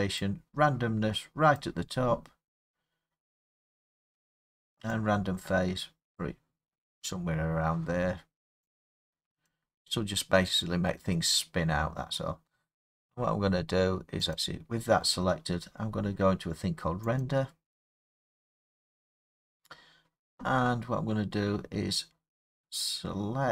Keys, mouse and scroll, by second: 1.6 click, 6.2 click, 9.5 click, 10.4 middle click, 10.4 middle click, 11.0 middle click, 14.4 click, 15.6 middle click, 15.9 middle click, 16.1 middle click, 17.2 click.